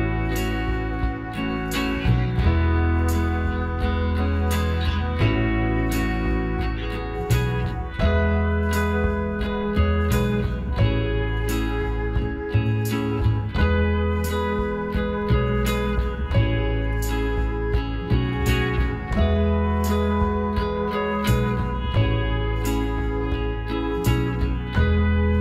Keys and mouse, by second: 5.2-6.9 drag, 5.7-7.1 middle drag, 6.5-8.1 right drag, 8.1-9.2 middle drag, 9.2-11.1 drag, 9.2 right click, 10.0-12.3 right drag, 10.9 middle click, 11.9-13.6 drag, 13.6 z, 14.4 z, 15.0 KP_1, 16.5 KP_Divide, 17.7 KP_1, 19.4 z, 20.5 middle click, 21.0 middle click, 21.3-22.3 middle drag, 22.3 s.